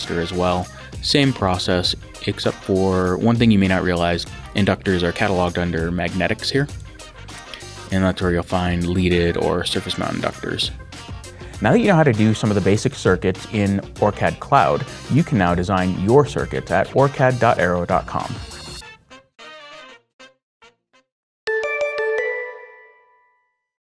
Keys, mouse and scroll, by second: 4.5 click, 6.7 click.